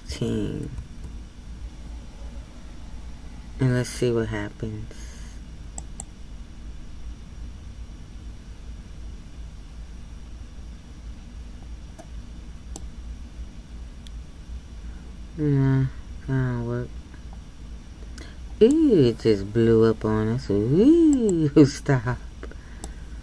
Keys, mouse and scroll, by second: 0.8-12.8 drag, 12.8-16.3 middle drag, 21.1-22.8 drag, 22.8-23.2 middle drag.